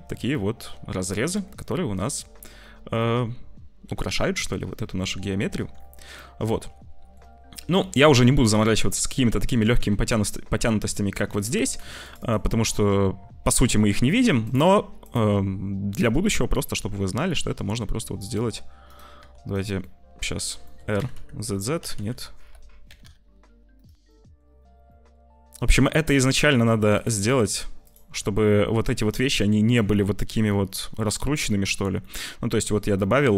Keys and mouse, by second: 1.4 middle click, 3.0 middle click, 3.9 Tab, 4.3 middle click, 5.4 Tab, 6.1 middle click, 7.7 shift+middle click, 8.3 middle click, 8.5 click, 9.1 Tab, 9.5 Tab, 9.8 Tab, 11.3 2, 11.6 click, 16.4 click, 17.7 r, 19.1 r, 19.7 click, 20.7 r, 24.1 click, 24.8 click, 25.6 click, 26.3 click, 26.6 1, 27.8 shift+click, 29.0 click, 30.4 j, 31.5 click, 31.6 Tab, 31.9 click, 32.8 click.